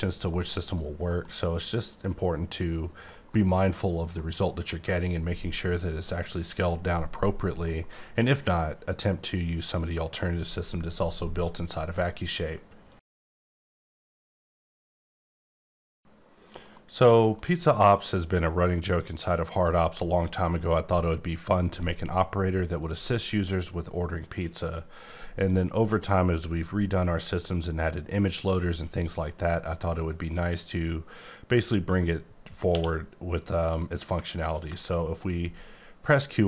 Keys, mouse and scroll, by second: 0.8 middle click, 2.1-3.1 scroll down 2, 3.1 middle click, 7.6 middle click, 7.7 middle click, 19.6 click, 32.7 q, 34.4 ctrl+click.